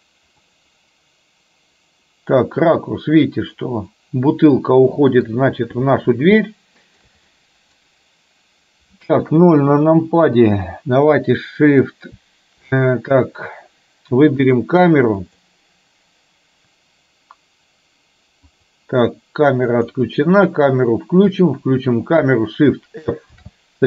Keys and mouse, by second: 0.6-5.3 middle drag, 6.6 shift+middle click, 7.5 middle click, 10.1 KP_0, 14.6 click, 15.2 click, 18.6 click, 21.6 click, 23.4 shift+f.